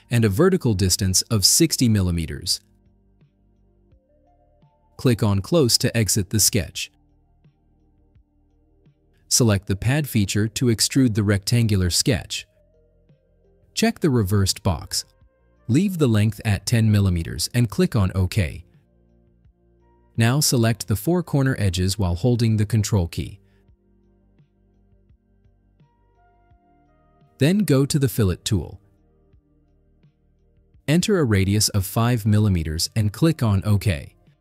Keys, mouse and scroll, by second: 1.5 6, 1.9 0, 3.0 Return, 7.0 click, 12.4 click, 14.5 click, 19.2 click, 20.3 scroll down 2, 20.4 middle click, 21.3 click, 21.6-22.1 drag, 22.5 ctrl+click, 22.9-23.5 drag, 23.9 ctrl+click, 25.0 ctrl+click, 25.5 click, 29.0 click, 32.1 5, 32.6 click.